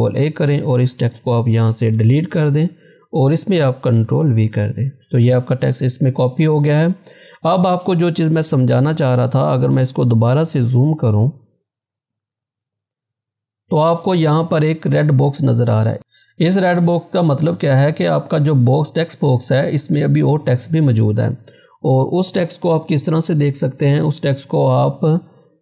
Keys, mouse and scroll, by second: 0.1 ctrl+a, 2.0 BackSpace, 4.4 ctrl+v, 11.6 click, 12.2 z, 12.7-15.6 drag, 22.5 -, 23.9 scroll down 1.